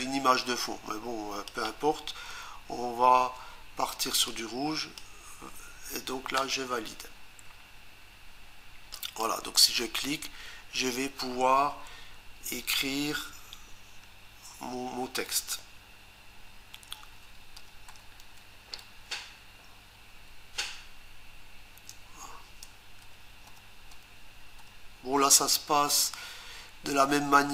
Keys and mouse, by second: 4.3 click, 6.4 Return, 8.9 click, 16.9-18.9 typing, 21.7 Return, 23.0 p.